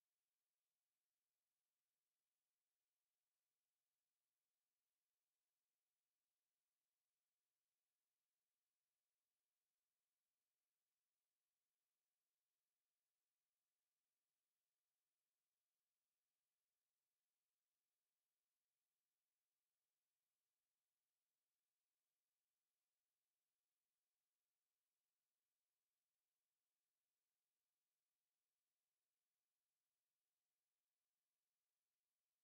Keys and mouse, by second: 4.5-6.3 drag, 9.3 middle click, 11.6 middle click, 11.8 KP_7, 16.3 middle click, 16.4 b, 20.6-21.9 middle drag, 31.4 x.